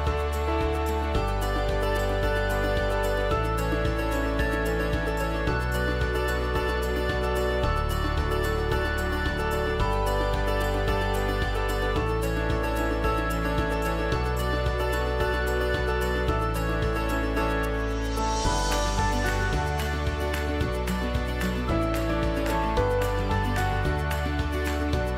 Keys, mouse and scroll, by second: 2.8-5.4 alt+drag.